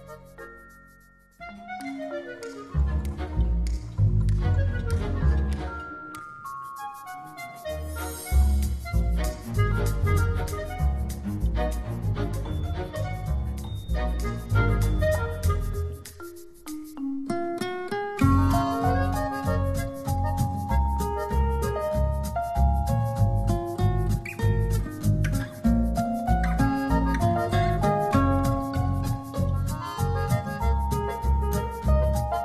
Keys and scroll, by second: 13.7 shift+super+i, 14.4 shift+super+j, 14.9 super+j, 18.4 v, 21.9 z.